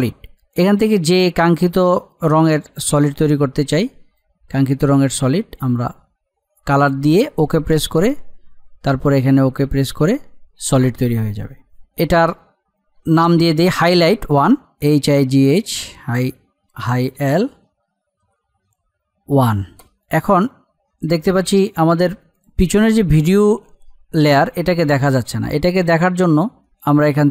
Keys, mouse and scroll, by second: 1.5-7.6 drag, 12.9 Return, 15.3 g, 16.5 space, 17.1 l, 18.0 space, 19.1 1, 19.7 Return, 19.9 click, 20.9-22.3 scroll down 1, 22.3 click, 23.9 scroll up 1.